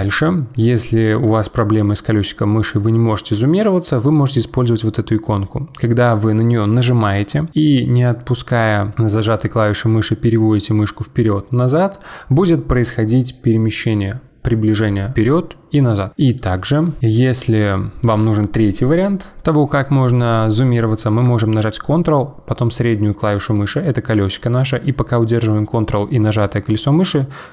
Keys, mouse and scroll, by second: 4.1-7.3 drag, 9.8-12.9 drag, 17.0-18.2 ctrl+middle drag, 21.9-25.0 ctrl+middle drag.